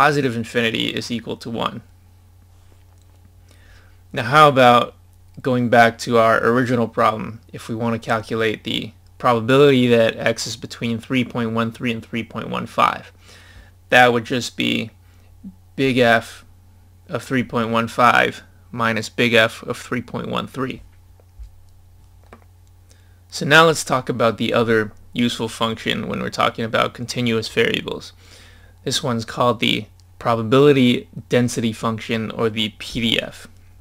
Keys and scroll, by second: 21.6 scroll down 1.